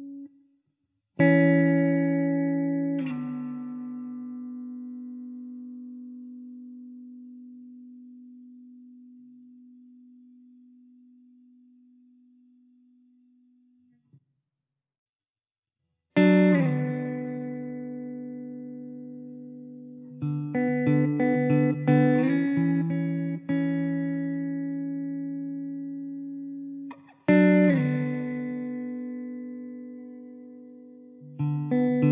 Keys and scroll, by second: 28.8 BackSpace.